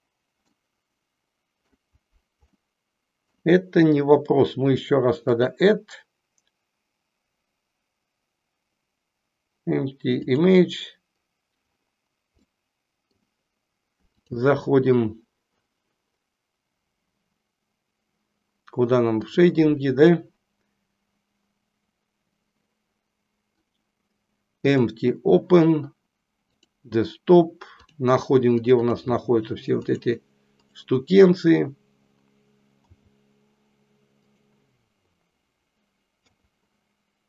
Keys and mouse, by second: 0.4-1.7 middle drag, 2.6 middle click, 5.2-10.4 drag, 12.4-13.2 middle drag, 14.2-15.4 drag.